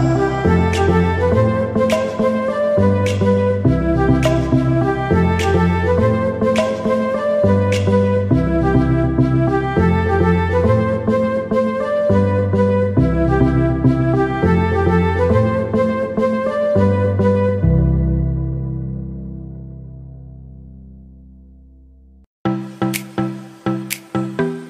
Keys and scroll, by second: 3.2 ctrl+shift+i, 3.4 ctrl+z, 7.4 ctrl+z, 8.0 ctrl+d, 10.2 ctrl+z, 11.9 ctrl+d, 14.2 ctrl+t, 24.0 ctrl+t, 24.4 ctrl+shift+i.